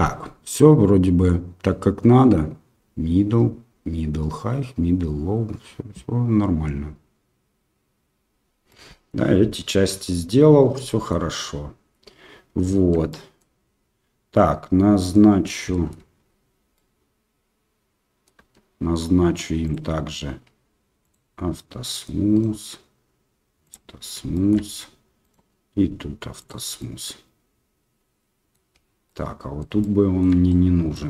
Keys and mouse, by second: 8.7-9.1 middle drag, 10.0 middle drag, 10.8 middle drag, 11.2 Tab, 12.8 Tab, 13.1 middle click, 15.1 middle click, 15.7 middle drag, 16.1 Tab, 16.7-18.2 middle drag, 18.4 Tab, 21.0 click, 21.8 middle click, 23.6 click, 24.3 shift+middle drag, 25.3-26.4 right drag, 26.4 click, 26.7-28.5 middle drag, 29.0-29.6 middle drag, 29.8-30.2 shift+middle drag, 30.4-30.9 middle drag.